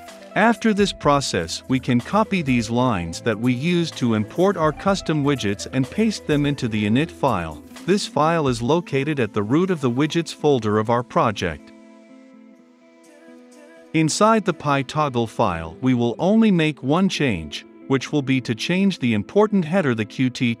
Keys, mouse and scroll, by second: 3.1-4.4 right drag, 4.4-8.5 drag, 8.5 middle click, 9.4 click, 10.1 Return, 10.8 ctrl+v, 11.4 middle click, 12.3-14.7 drag, 14.7 middle click, 15.4-20.6 drag.